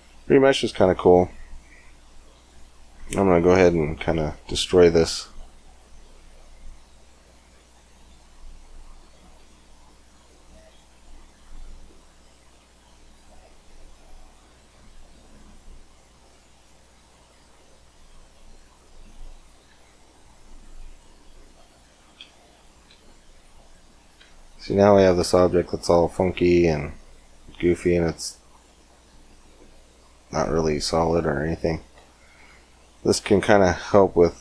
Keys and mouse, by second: 2.2 shift+a, 5.9 s, 9.8-13.8 drag, 13.8 middle click, 16.1 click, 16.4-19.6 drag, 19.2 right click, 19.6 x, 20.2-22.7 drag, 24.0 Tab, 26.2 z, 31.0 z, 31.8 Tab, 33.8 Tab.